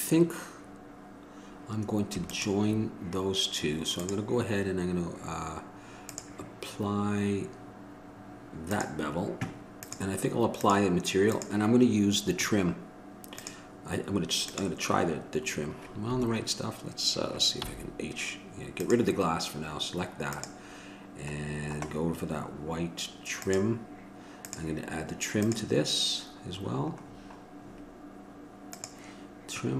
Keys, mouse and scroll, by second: 17.8 h, 19.0-29.7 drag.